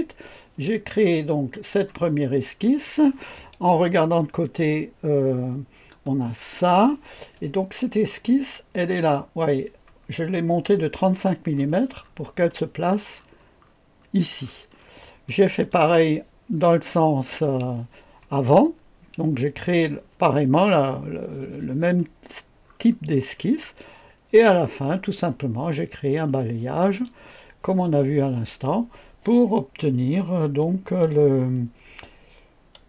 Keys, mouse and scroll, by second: 1.5 click, 2.4-3.1 scroll down 2, 3.7 KP_1, 5.2-6.0 scroll down 2, 6.0 click, 8.7 click, 11.5-12.8 scroll up 3, 12.5 right click, 13.1-14.4 scroll up 1, 14.4-15.2 scroll down 1, 15.2-15.7 right drag, 18.5-19.7 scroll up 1, 19.7-21.9 scroll up 1, 21.9-22.6 scroll up 1, 22.6-23.6 scroll down 1, 23.6 click, 24.7-27.1 drag.